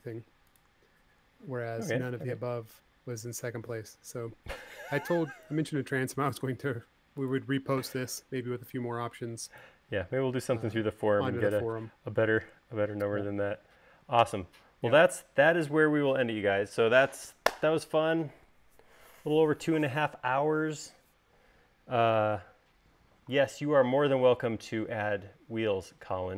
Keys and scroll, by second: 6.9 m, 10.8 space.